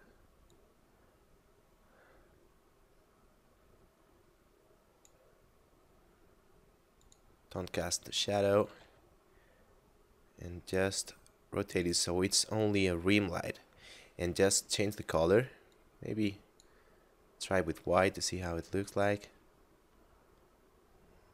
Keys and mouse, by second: 6.9 click, 8.7 r, 8.8 z, 11.8 click, 13.2 middle click, 14.4 click, 18.8 click.